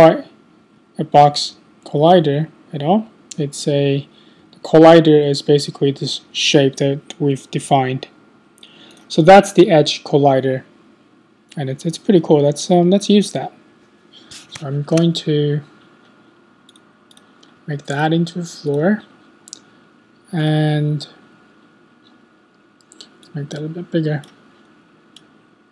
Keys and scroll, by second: 0.1 Right, 0.6 Right, 1.3 Left, 1.8 Left, 2.9 Left, 4.4 Right, 5.2 Left.